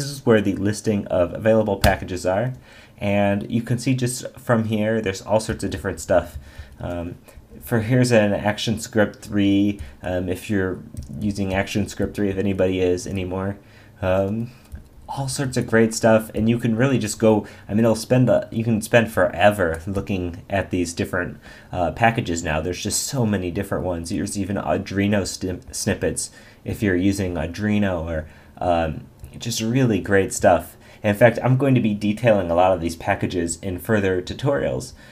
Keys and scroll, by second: 1.8 Return, 5.5 Down, 7.3 Up, 9.3 Down, 24.2 Up, 25.2 Down.